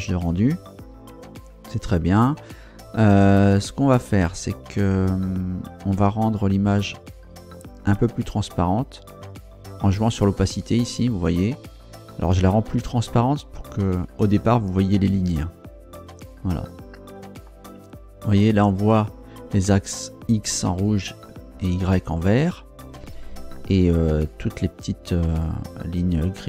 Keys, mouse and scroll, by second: 9.9-16.3 drag, 17.6-18.1 scroll up 4, 18.7 scroll up 2.